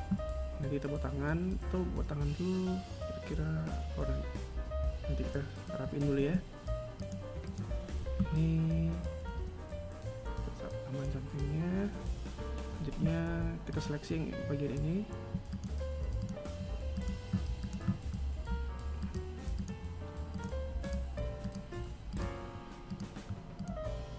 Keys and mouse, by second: 5.6 right click, 5.6 r, 13.3 right click, 15.1 shift+right click, 15.7 shift+right click, 16.5 shift+right click, 17.2 shift+right click, 18.6 shift+right click, 19.1 shift+right click, 19.8 shift+right click, 20.3 shift+right click, 21.0 shift+right click, 21.7 shift+right click, 22.4 shift+right click, 23.1 shift+right click, 23.8 shift+right click.